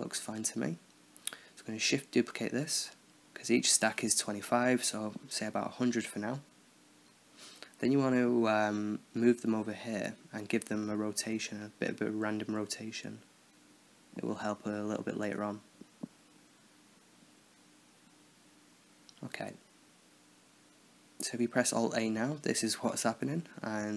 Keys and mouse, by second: 0.0-2.5 middle drag, 2.2 shift+d, 4.4 shift+d, 5.8 shift+d, 8.3 KP_7, 9.5-11.1 middle drag, 11.1-12.1 drag, 11.1-11.8 right drag, 12.4 r, 14.5-15.6 right drag, 14.7 r, 16.3-17.5 middle drag, 17.9-19.5 middle drag, 20.8 alt+a, 23.2-23.9 drag.